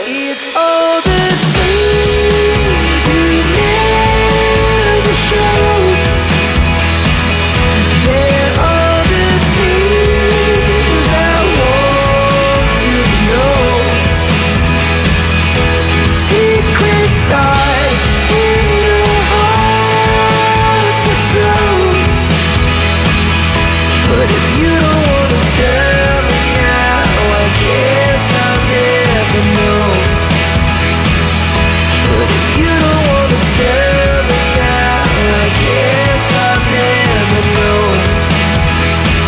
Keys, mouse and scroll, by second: 1.5 click, 2.4 click, 2.7 click, 4.5 click, 5.2 click, 6.7 click, 7.4 ctrl+n, 11.0 click, 12.0 click, 12.9 scroll down 1, 13.5-14.5 scroll up 1, 14.8 click, 17.9 click, 18.1 double click, 18.7 click, 21.1 click, 22.8 click, 23.6 click, 24.3 click, 25.0 click, 25.9 5, 26.7 click, 27.1 5, 29.2 click, 31.1 5, 31.9 click, 32.5 3, 37.3 click.